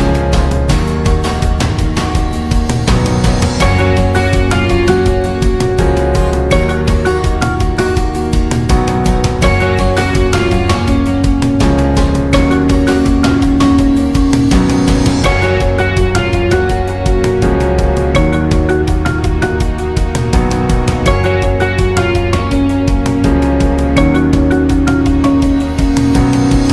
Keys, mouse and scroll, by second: 1.2 alt+scroll up 1, 1.4 space, 1.5 click, 1.9 space, 2.5-6.1 drag, 6.5 alt+scroll down 1, 6.7-9.7 typing, 6.9 click, 7.9 alt+scroll down 1, 8.4 click, 9.5 alt+scroll up 1, 9.8-12.3 drag, 12.3 ctrl+g, 12.8 click, 13.4 alt+scroll down 1, 13.6 space, 13.8-17.6 drag, 17.9 alt+scroll up 1, 18.1 space, 18.3 click, 18.6 space, 21.2 click, 23.7 c.